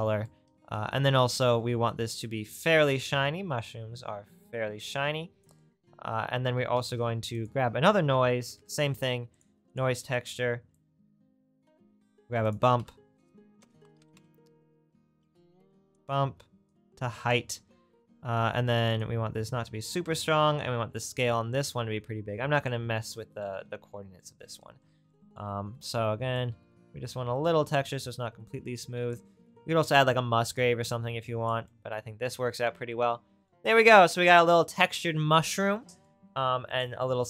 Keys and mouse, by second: 6.9 shift+a, 9.9 right click, 12.0 shift+a, 16.0 right click, 24.9 middle click, 30.7-33.8 middle drag, 33.8-36.8 drag, 36.8-37.2 right drag.